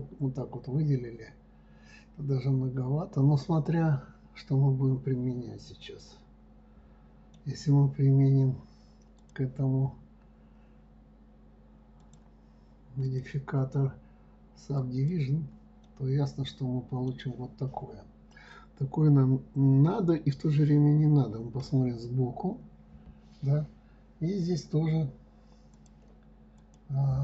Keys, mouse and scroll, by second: 9.6 click, 12.4 click, 13.4-16.3 drag, 16.3-19.3 middle drag, 23.0 scroll up 2, 26.1 click, 27.0 click.